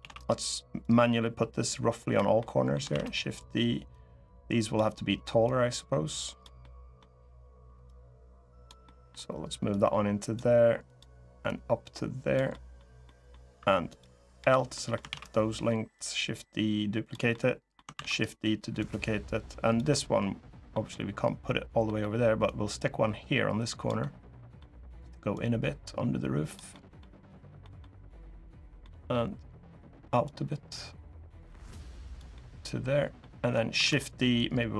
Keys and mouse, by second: 0.6-1.9 drag, 2.1 middle click, 2.7 shift+d, 3.6 click, 5.2 click, 6.3 middle click, 7.6 click, 8.6 middle click, 9.5 click, 10.6 click, 11.2 click, 12.2 middle click, 12.8 middle click, 14.1 l, 14.5 middle click, 14.8 shift+d, 15.7-16.8 drag, 17.0 middle click, 17.7 shift+d, 17.8 click, 18.5 click, 19.6 middle click, 21.6 middle click, 22.2-23.6 drag, 23.7 middle click, 25.1-26.3 drag, 26.4 middle click, 27.3 middle click, 28.5 middle click, 30.0-31.9 drag, 32.1 middle click, 33.5 shift+d, 34.2 click.